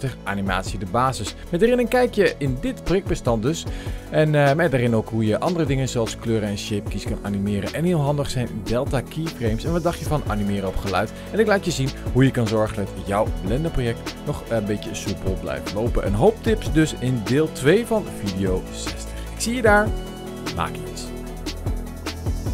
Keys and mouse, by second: 0.4 click, 0.4 space, 0.7 click, 1.6 click, 2.2 click, 2.3 space, 2.8 space, 3.4 space, 3.4 click, 3.9 Left, 3.9 Left, 4.0 Left, 4.0 Left, 4.0-4.8 Right, 4.9 click, 5.1 click, 5.8 click, 5.8 space, 6.4 space, 7.0 space, 7.0 click, 7.4 Left, 7.5 Left, 7.5 Left, 7.6-8.4 Right, 8.5 click, 8.5 space, 9.9 space, 10.0 click, 10.1 click, 10.3 click, 10.4 click, 10.5 click, 10.7 middle click, 10.9 middle click, 11.0 middle click, 11.0 middle click, 11.1 click, 11.2-11.9 typing, 11.3 middle click, 11.4 middle click, 11.5 middle click, 11.6 click, 11.7 click, 11.9 click, 12.0 click, 12.6 middle click, 12.7 click, 13.0 space, 13.1 space, 13.1 click, 13.2 middle click, 13.3 middle click, 13.5 middle click, 13.7 click, 13.8 click, 14.0 click, 14.5 click, 14.8 right click, 14.9-16.1 drag, 16.1 Left, 16.3 click, 16.8 ctrl+s, 19.2 click, 19.5 click, 20.8 click, 21.0 click, 21.7 click, 21.9 click, 22.3 click, 22.3 click.